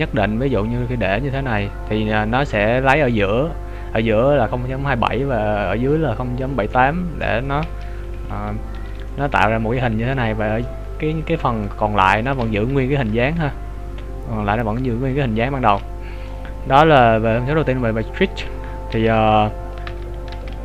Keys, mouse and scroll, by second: 6.7 middle click, 8.2 KP_Decimal, 9.1 middle click, 12.5 KP_3, 13.1 KP_1.